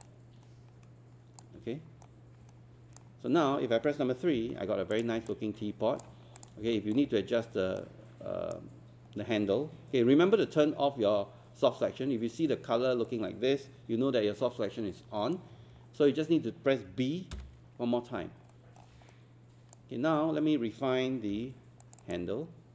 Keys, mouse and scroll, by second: 0.1-1.4 alt+drag, 2.1-3.2 right drag, 4.3 3, 4.9 click, 5.3 alt+click, 6.4 click, 6.7 alt+middle click, 7.5 scroll up 1, 7.8-9.2 right drag, 17.3 b, 18.5 alt+middle click, 19.1 right click, 21.3 q, 21.8 click.